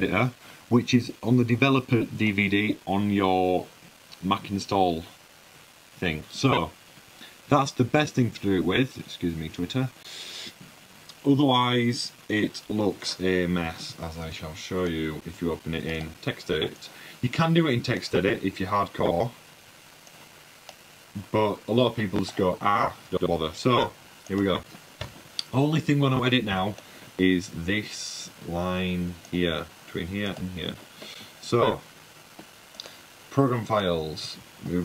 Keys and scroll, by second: 14.4 super+`, 14.9 super+`, 15.1 super+`, 24.2 super+w, 25.1 h.